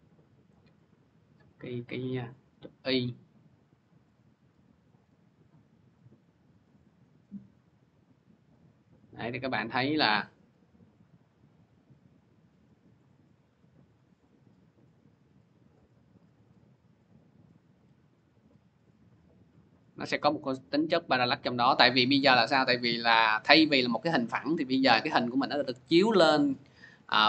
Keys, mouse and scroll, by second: 1.4 click, 3.3 click, 4.0 click, 4.9 click, 8.3 click, 10.9 click, 11.5 click, 13.7 click.